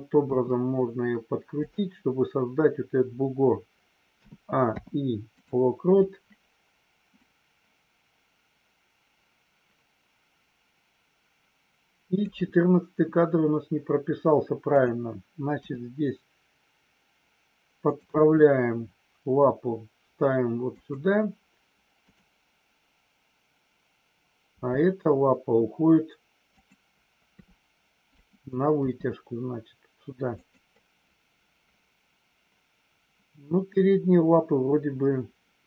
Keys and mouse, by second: 0.3 r, 4.5 i, 7.2-12.2 drag, 14.8-15.3 drag, 15.5 r, 17.9 click, 18.1 g, 21.9 click, 26.4 click, 27.3 r, 28.2 click, 28.7 g.